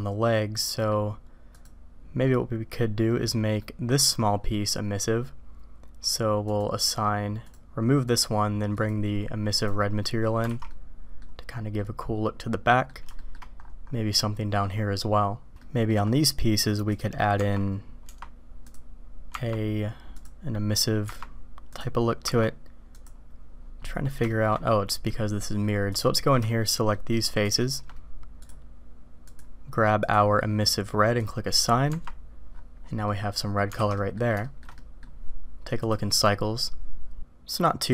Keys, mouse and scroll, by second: 1.5 click, 2.2-3.3 middle drag, 3.6-3.9 middle drag, 6.5 click, 7.4 click, 8.1 click, 8.7-9.8 drag, 10.6 alt+a, 10.7-11.2 drag, 11.8-12.9 drag, 13.2 shift+click, 14.2 click, 15.5 shift+middle click, 15.6 shift+drag, 16.9 click, 17.4 Tab, 18.1 Tab, 18.6 click, 19.3 Tab, 20.1 click, 21.0 Tab, 21.7 click, 22.2 Tab, 22.9 click, 23.8 middle click, 24.3 shift+click, 25.1 click, 25.9 click, 26.5 shift+click, 27.4 shift+click, 28.6 click, 29.2-30.3 drag, 31.1 click, 31.9 Tab, 33.1-33.6 drag, 33.8 alt+a, 33.9 click, 34.4 shift+click, 34.7 click, 35.8 click.